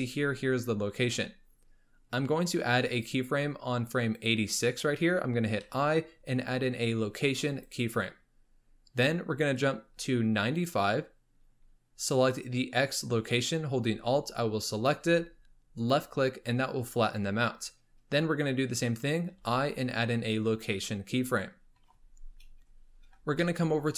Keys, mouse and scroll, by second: 2.3-5.3 drag, 5.6 i, 9.6-12.6 drag, 14.7-15.9 alt+drag, 19.3 i, 22.7 scroll down 1, 23.4-23.9 shift+middle drag.